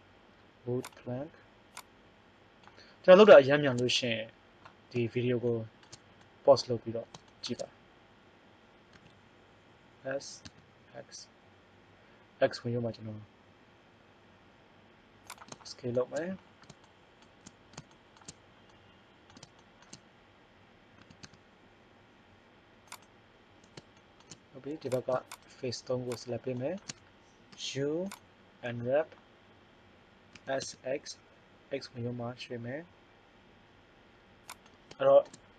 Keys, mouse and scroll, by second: 1.0-3.4 drag, 8.8 s, 15.7 click, 18.2-19.5 middle drag, 21.0 s, 24.9 right click, 27.4 u, 30.3 s, 35.0 middle click.